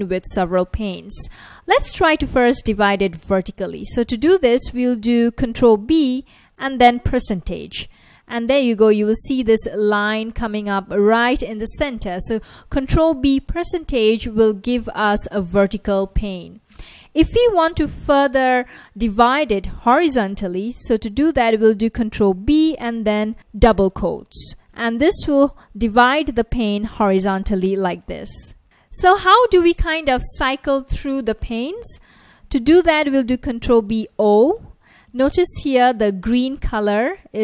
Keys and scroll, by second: 5.8 ctrl+b, 6.7 shift+5, 9.7 F1, 22.2 ctrl+b, 23.3 shift+', 26.0 F1, 33.7 ctrl+b, 34.2 o, 36.7 F1.